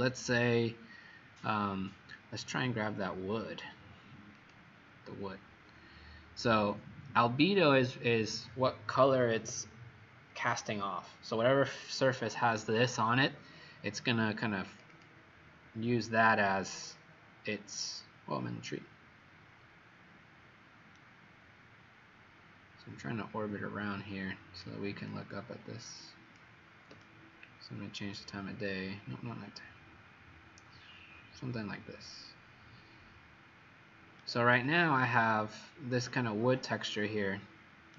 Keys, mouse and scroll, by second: 14.9 click, 16.6-17.2 scroll down 7, 18.0-18.7 scroll up 4, 19.2 middle click, 20.9 right click, 25.0 click, 27.0 shift+right click, 35.0 right click.